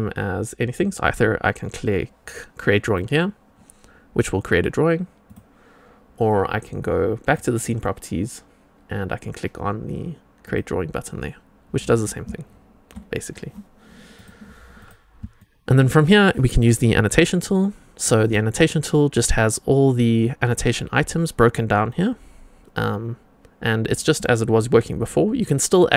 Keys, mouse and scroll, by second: 2.8 click, 7.2 click, 10.4 click, 14.7 click, 15.3 shift+middle drag, 17.2 click, 18.1 click, 19.6-25.9 drag.